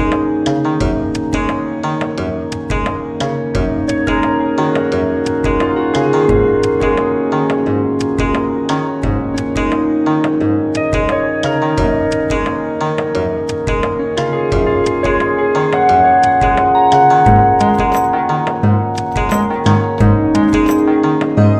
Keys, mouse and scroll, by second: 3.3 ctrl+z, 7.3 s, 15.6 s, 21.0 g.